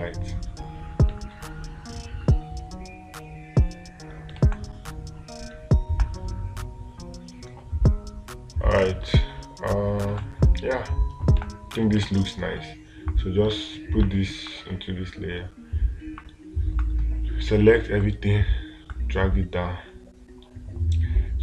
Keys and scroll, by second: 0.0 space, 4.8 space, 10.6 space.